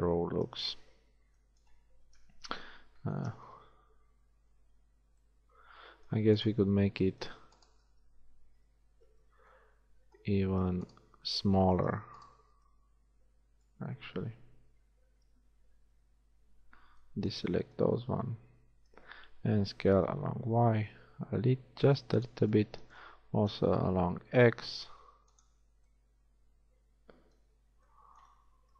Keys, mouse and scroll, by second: 0.9 Tab, 2.2 KP_1, 3.4 z, 5.0 z, 15.2 KP_1, 16.0 z, 17.2 b, 18.1 z, 20.1 s, 23.4 s, 28.6 ctrl+z.